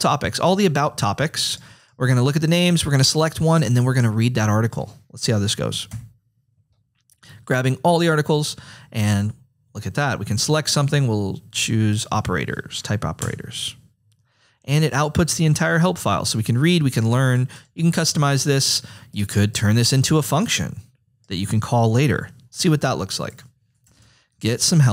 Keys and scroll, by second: 13.3 Return, 23.6-24.9 typing.